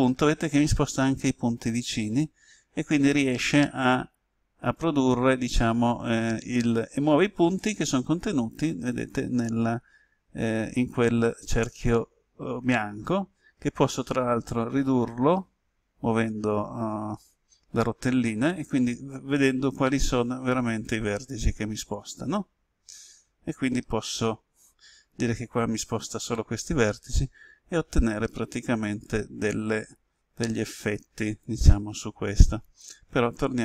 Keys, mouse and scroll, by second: 13.2-13.5 scroll up 1, 18.0-18.5 scroll down 1, 22.8 scroll up 1, 23.8-24.7 scroll up 1, 25.7-26.6 scroll up 1, 26.6-32.7 drag, 33.0 ctrl+z, 33.4 ctrl+z.